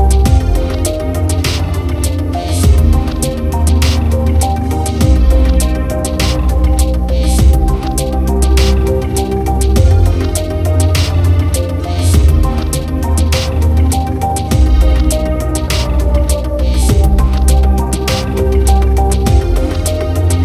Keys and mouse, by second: 0.1 right click, 0.8 right click, 1.8 right click, 2.7 right click, 4.3 right click, 6.4 right click, 9.4 right click, 10.1 right click, 10.6 right click, 11.3 right click, 12.4 right click, 12.9 right click, 13.5 right click, 15.0 right click, 15.9 right click, 16.5 right click, 16.8 right click, 17.4 right click, 18.4 right click, 19.2 right click, 19.6 right click, 19.9 right click.